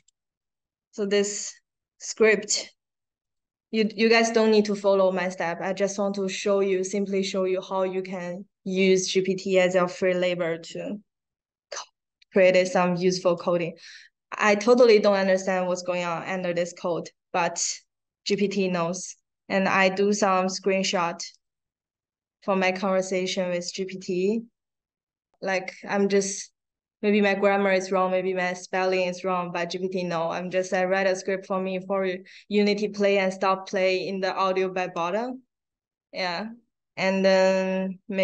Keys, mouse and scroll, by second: 3.2 click, 3.7 click, 13.6-13.9 scroll up 2, 14.2 scroll down 2, 15.6-16.5 scroll up 3, 21.3 click, 21.8 middle click, 23.5 middle click, 24.1 click, 24.8 click, 24.9 click, 35.1 middle click, 36.2 click, 36.8 middle click, 38.0 middle click.